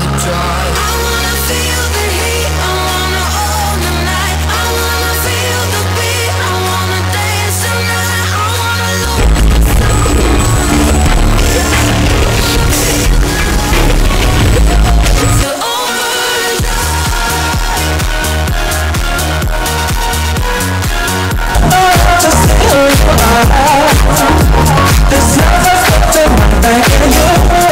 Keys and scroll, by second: 15.5 Page_Down.